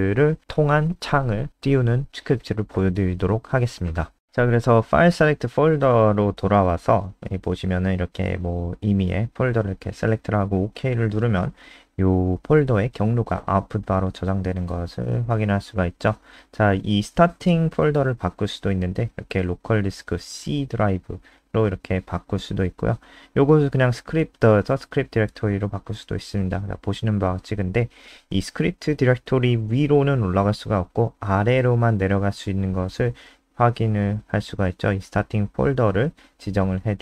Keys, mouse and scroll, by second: 7.0-7.6 scroll down 1, 7.6-9.2 scroll down 1, 9.2 click, 13.9 Up, 14.2 End, 14.6-16.4 typing, 16.6 ctrl+s, 17.3 F5, 20.8 click, 21.6 Return, 22.3-24.0 typing, 24.3 ctrl+s, 24.9 F5.